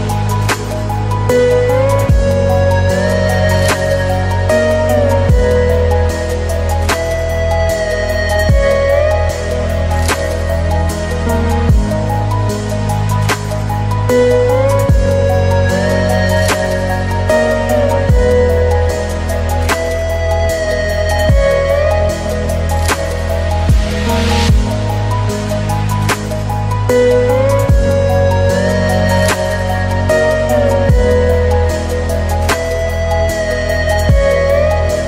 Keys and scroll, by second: 4.4 ctrl+z, 10.2 ctrl+z, 28.7 ctrl+alt+space, 31.8 ctrl+j, 33.2 ctrl+t.